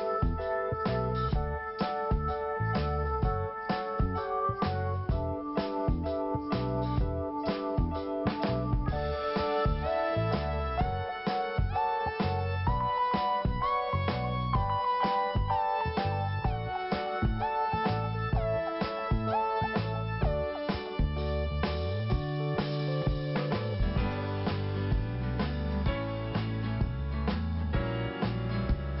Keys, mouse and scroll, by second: 0.6 click, 2.2 click, 3.7 click, 5.4 click, 6.7 click, 8.1 scroll down 1, 8.8 5, 10.8 scroll up 1, 12.7 click, 13.3 scroll down 1, 14.8-15.2 scroll up 1, 19.5 click, 21.4 click, 21.5 click, 22.3 click, 24.2 click, 26.1 click, 27.2 click, 28.4-28.9 scroll down 1, 28.9-29.0 scroll up 1.